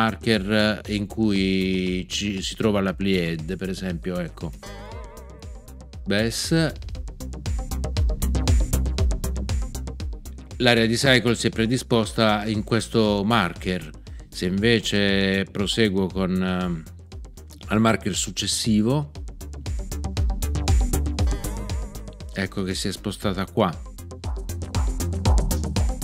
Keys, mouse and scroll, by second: 4.6 alt+., 21.2 alt+..